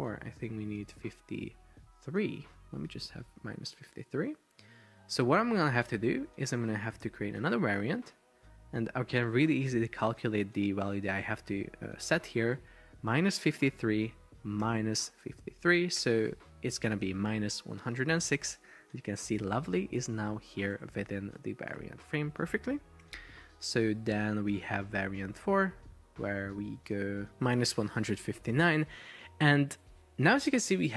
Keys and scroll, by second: 5.8 super+a, 5.8 super+c, 14.7 super+v, 16.0 Return, 20.7 shift+super+4, 22.0 Escape.